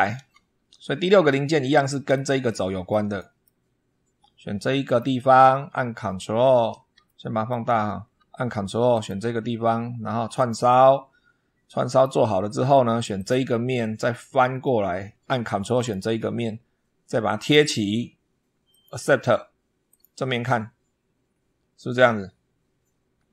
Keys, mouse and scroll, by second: 0.0 super+2, 1.1-2.2 middle drag, 2.3 shift+middle click, 3.0 shift+middle click, 4.7 click, 6.4 scroll down 2, 6.9 shift+middle click, 8.8 ctrl+click, 10.2 click, 11.7 click, 13.0 click, 13.6-14.7 middle drag, 15.6 ctrl+click, 17.2 click, 18.5 click, 19.7 click, 20.7-21.3 scroll up 2.